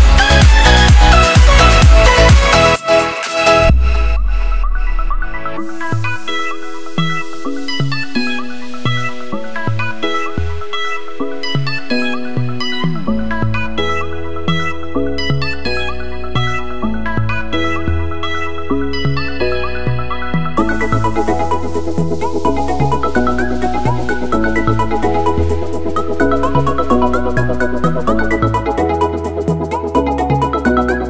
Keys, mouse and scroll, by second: 0.4 alt+scroll up 2, 1.1 click, 2.5-4.4 typing, 4.7 click, 7.3-8.1 typing, 9.9-12.8 typing, 13.3 click, 14.1 t, 14.4 click, 15.5 Return, 16.1 0, 16.6 click, 18.3 s, 19.5 ctrl+shift+s, 21.2 click, 28.5 ctrl+s, 29.6 click.